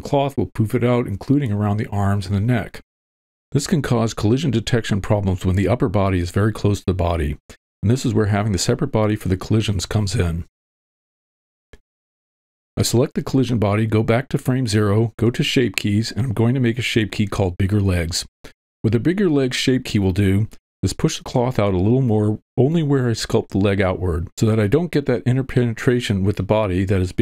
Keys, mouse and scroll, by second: 6.1 click, 9.3-10.3 drag, 13.1 click, 13.8 middle click, 15.4 click, 15.8-17.5 shift+drag, 16.5 g, 26.7 click.